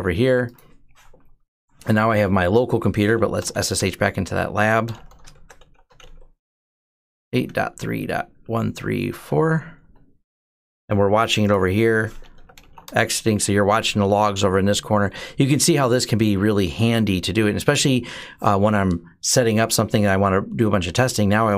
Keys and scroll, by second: 3.2-3.6 typing, 4.7-5.8 typing, 7.0-9.2 typing, 9.6 Return, 12.0-13.0 typing.